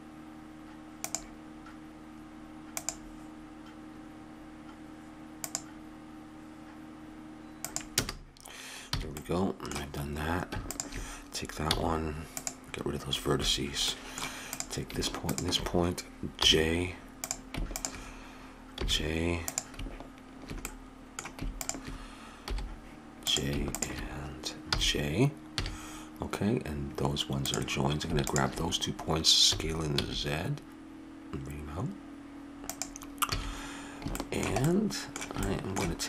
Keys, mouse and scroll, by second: 8.9 a, 9.2 middle click, 9.4 middle click, 10.6-13.3 drag, 11.7 x, 13.9 middle click, 14.5 click, 15.1 middle click, 15.8-20.7 drag, 16.4 j, 18.8 j, 20.7 middle click, 21.6 middle click, 22.5 j, 24.7 j, 25.6 a, 29.5 s, 33.3 a, 34.2 middle click.